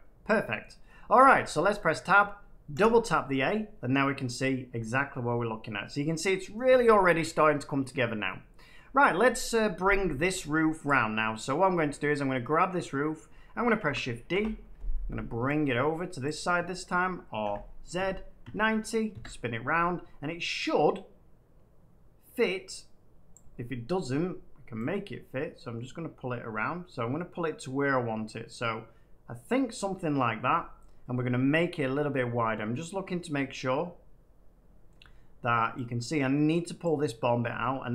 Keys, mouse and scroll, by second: 0.5 middle click, 0.9 middle click, 1.2 Tab, 2.0 middle click, 2.7 a, 2.8 a, 6.1 middle click, 10.8 click, 11.4 middle click, 13.2-14.6 middle drag, 13.7 d, 14.2 Return, 16.2 click, 17.3 r, 17.9 z, 18.3 9, 18.6 0, 19.0 Return, 23.2 click, 24.0 middle click, 29.6 click, 29.9 middle click, 30.0 middle click, 30.1 middle click, 31.6 shift+middle click, 34.8 middle click, 36.7 click, 37.1 middle click, 37.5 shift+middle click.